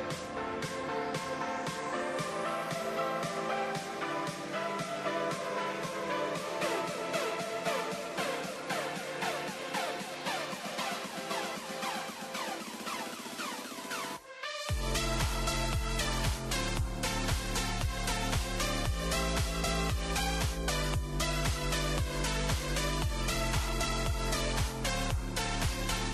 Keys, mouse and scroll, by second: 0.3 shift+middle drag, 0.6-1.0 scroll down 3, 1.0-1.5 middle drag, 1.5-1.9 scroll up 1, 1.9-2.3 shift+middle drag, 2.3-4.3 scroll up 1, 4.3 KP_0, 5.8 click, 6.2-7.0 scroll up 5, 7.0-7.5 scroll down 6, 9.7 n, 10.8 click, 11.5 click, 11.9-12.8 scroll up 7, 12.8-13.3 shift+middle drag, 13.3 scroll up 2, 13.8-14.2 shift+middle drag, 14.2 shift+scroll up 1, 14.3-14.8 scroll down 2, 14.8-16.5 shift+middle drag, 16.8 click, 19.6-22.3 drag, 23.4 click, 25.0-26.1 drag.